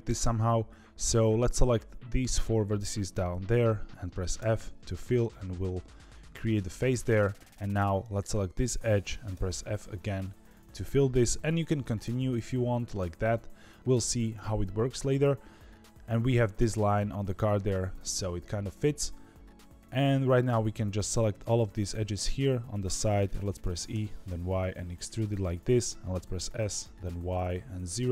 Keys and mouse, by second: 6.7 2, 9.3 f, 12.0 f, 23.6 e, 26.2 s.